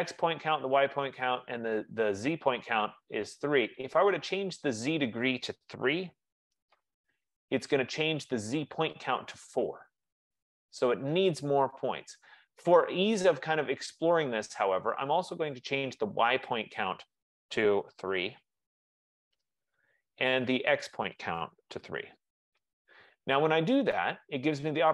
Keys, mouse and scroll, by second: 0.2-1.7 drag, 4.7-9.7 drag, 6.0 3, 6.2 Return, 15.6-18.1 drag, 18.1 3, 19.5 Return, 20.9 click, 21.8 3, 22.2 Return.